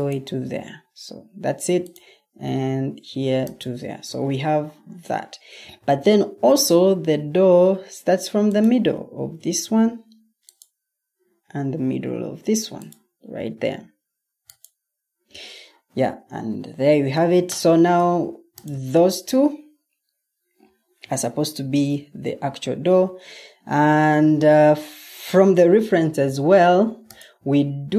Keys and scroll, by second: 22.5 Escape, 25.9 super+Tab.